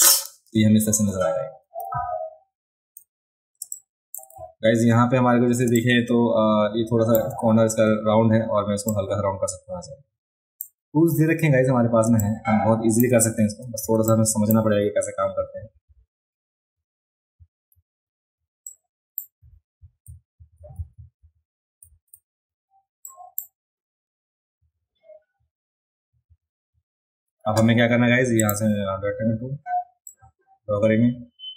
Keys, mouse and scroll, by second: 1.1-1.6 scroll down 3, 2.0-2.5 alt+scroll up 2, 3.6 space, 3.7 click, 5.7 space, 5.8-7.2 drag, 8.9-10.6 drag, 11.0-11.4 scroll up 1, 12.1 space, 12.2 click, 13.8 a, 14.1 click, 18.7 click, 23.1 click, 28.4 click, 30.1-31.5 drag.